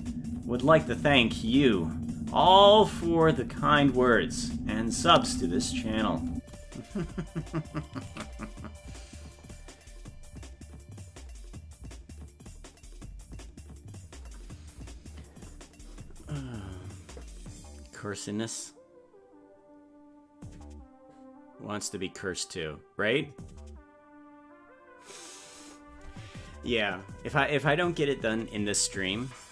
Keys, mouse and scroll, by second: 6.3 space, 8.5 ctrl+s.